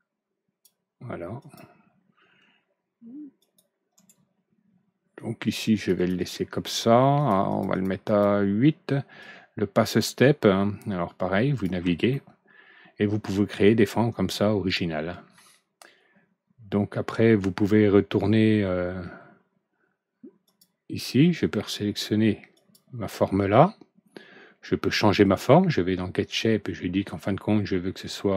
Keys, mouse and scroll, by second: 1.3 click, 3.3 click, 3.9 right click, 5.4 click, 5.7 click, 5.9 click, 6.1 click, 7.1 click, 7.4 click, 7.6 click, 8.0 click, 9.1-11.6 drag, 11.8 alt+Right, 12.0-15.3 middle drag, 20.4 click, 22.5 click, 25.2 click.